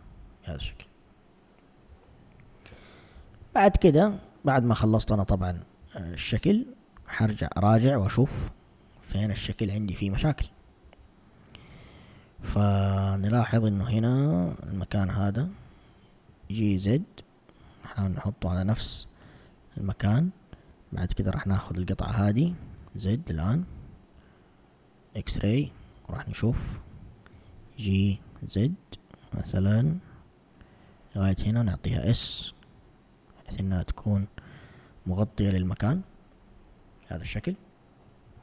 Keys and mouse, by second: 1.9 1, 3.2 a, 3.2 a, 5.8 1, 7.1 z, 10.2 click, 14.8 alt+click, 14.9 alt+click, 16.5 g, 21.7 alt+click, 22.8 z, 23.5 z, 25.1 click, 27.4 g, 31.7 s.